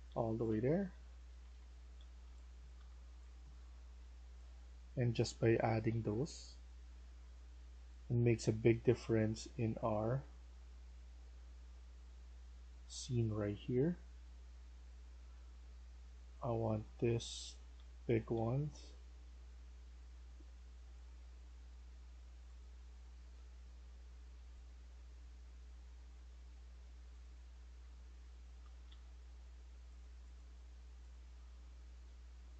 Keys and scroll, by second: 0.0-0.5 typing, 1.2 Escape, 1.5 Escape, 1.6-7.6 typing, 17.6 w, 18.2 w, 27.4-29.3 typing, 31.2-32.5 typing.